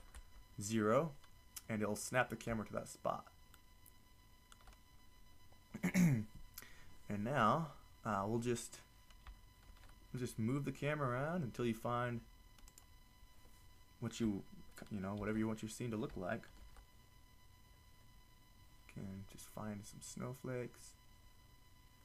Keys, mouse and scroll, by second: 0.0 ctrl+alt+KP_0, 10.2 shift+f, 12.8-13.4 drag, 15.3 shift+s, 17.4 shift+f.